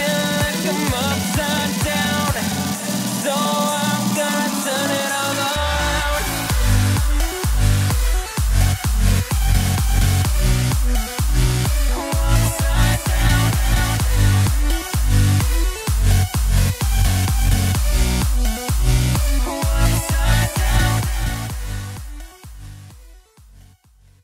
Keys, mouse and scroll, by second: 9.9-24.2 drag.